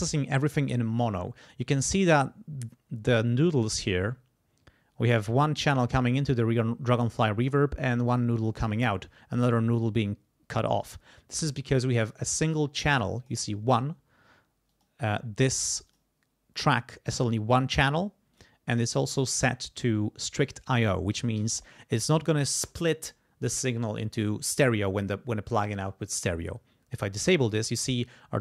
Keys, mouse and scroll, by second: 12.0 click, 13.2 click, 14.7 click, 15.9 click, 18.3 click, 19.3 click, 26.9 click.